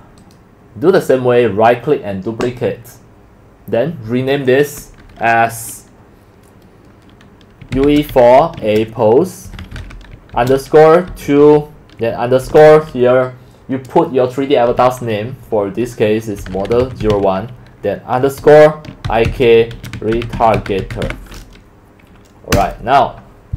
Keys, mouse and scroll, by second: 2.4 click, 7.5-12.9 typing, 16.1-17.6 typing, 19.0-21.5 typing, 22.5 Return.